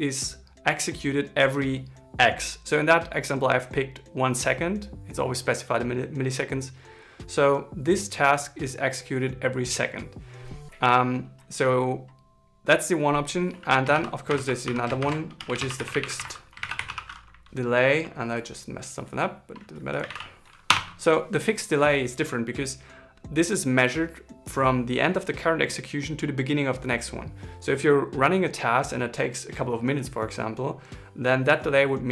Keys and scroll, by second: 14.3 alt+Left, 16.5 ctrl+shift+d.